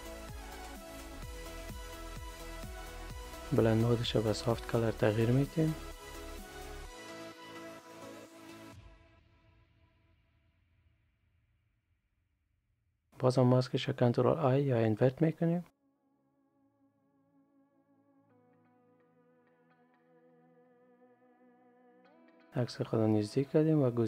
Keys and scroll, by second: 12.6 ctrl+i.